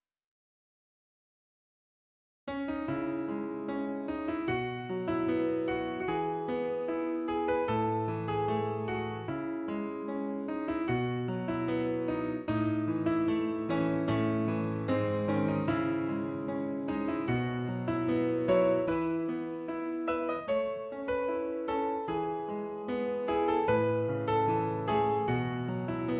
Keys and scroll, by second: 15.1 Tab, 22.1 ctrl+Tab, 22.9 a, 23.5 l, 25.4 ctrl+i.